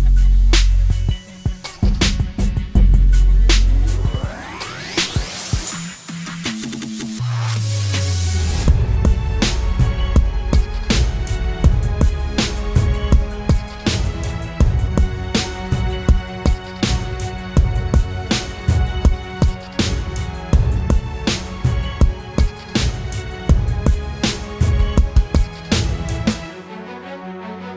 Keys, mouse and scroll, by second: 0.2 double click, 4.9 double click, 11.1 right click, 13.3 typing, 15.8 double click.